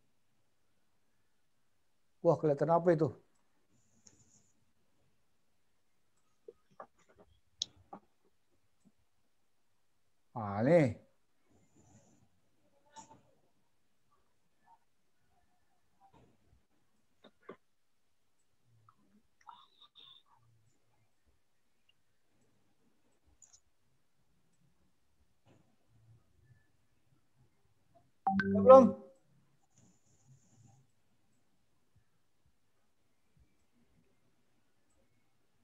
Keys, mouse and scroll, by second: 4.7 click, 6.4 click, 8.9 click, 14.5 click, 18.6 click, 19.9 click, 21.3 click, 23.4 click, 25.8 click, 29.3 click, 31.6 click, 35.1 click.